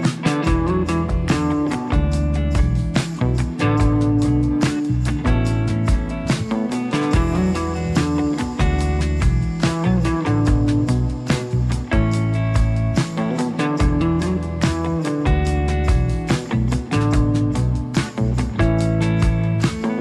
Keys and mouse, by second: 0.0 click, 0.5 ctrl+f, 0.5 ctrl+click, 0.7 ctrl+click, 1.0 ctrl+click, 1.3 ctrl+click, 2.2 click, 2.6 click, 3.0 1, 3.0 f, 3.1 1, 3.5 f, 3.8-6.1 drag, 5.3 ctrl+z, 6.3 3, 6.3 f, 6.4 f, 6.7 click, 7.4 click, 7.9 click, 8.8 middle click, 9.8 click, 10.0 ctrl+z, 10.0 f, 10.3 click, 11.1 ctrl+click, 11.1 3, 12.0 ctrl+click, 12.4 ctrl+click, 12.8 ctrl+click, 13.3 f, 13.8 ctrl+click, 14.7 ctrl+click, 16.0 click, 16.7 shift+click, 17.0 shift+click, 17.7 shift+click, 18.0 shift+click, 18.7 3, 18.9 2, 19.1 click, 19.4 2, 19.7 click.